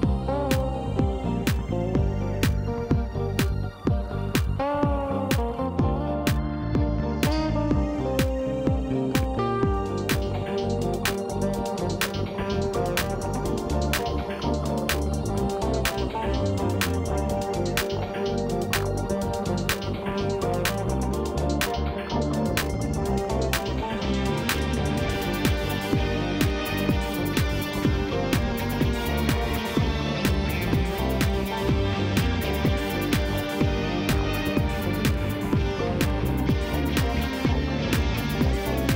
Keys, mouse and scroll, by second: 0.2 shift+click, 0.9 f, 1.3 click, 2.4 shift+click, 2.7 f, 3.1 click, 3.3 shift+click, 3.8 shift+click, 4.1 shift+click, 4.5 f, 4.8 shift+click, 5.6 shift+click, 5.8 shift+click, 6.3 f, 6.5 middle click, 7.2 click, 7.9 shift+click, 8.2 shift+click, 8.8 f, 9.0-9.3 scroll up 1, 9.3 shift+middle click, 10.1-12.5 drag, 12.5 f, 13.1 click, 14.3 f, 14.4 middle click, 14.7 scroll down 3, 15.6-16.7 drag, 16.7-18.3 middle drag, 19.3 click, 19.9 click, 20.9 g, 23.4-24.5 drag, 25.6 g, 27.5 click, 28.3 g, 37.9 Tab, 38.3 drag, 38.8 click.